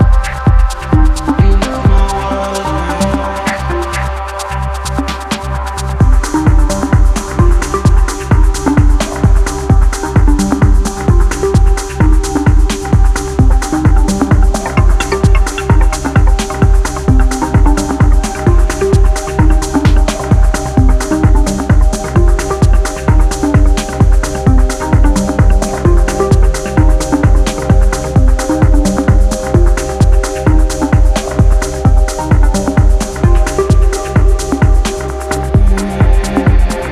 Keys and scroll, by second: 5.3 w, 6.8 w, 11.6 s, 12.3 c, 13.0 d, 16.6-21.1 typing, 25.7 shift+u, 26.4 a, 27.3 x, 27.8 x, 32.7-36.9 typing.